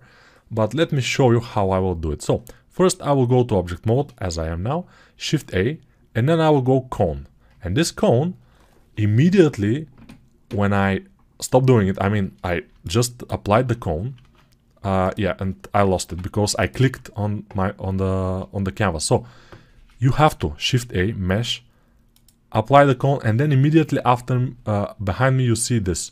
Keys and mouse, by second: 5.1 shift+a, 13.5-15.0 drag, 13.5-26.0 right drag, 14.1 ctrl+z, 15.9 x, 20.3 shift+a, 26.0 drag, 26.0 right click.